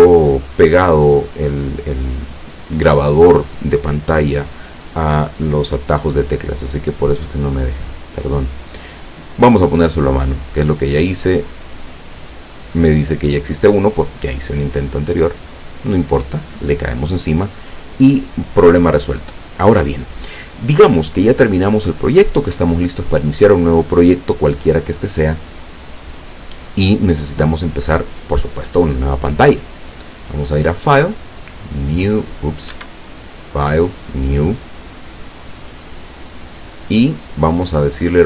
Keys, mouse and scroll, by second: 11.5 click, 15.4 click, 30.7 click, 31.9 click, 32.8 Escape, 33.5 click, 34.0 click, 35.7 click, 36.3 click.